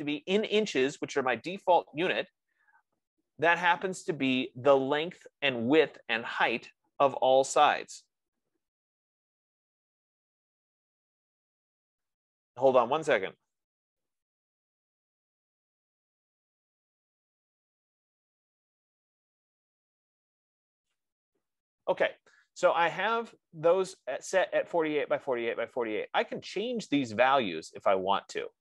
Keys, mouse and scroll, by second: 7.9 F15.